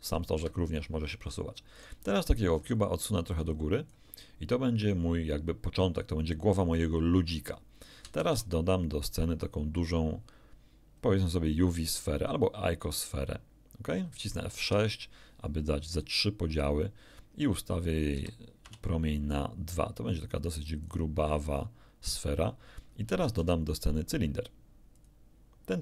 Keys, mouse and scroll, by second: 0.7 Escape, 1.7 right click, 2.5 scroll down 2, 3.3 click, 8.2 shift+a, 13.0 click, 14.6 F6, 15.9 click, 18.1 s, 18.6 2, 20.9 click, 23.2 shift+a, 24.9 click.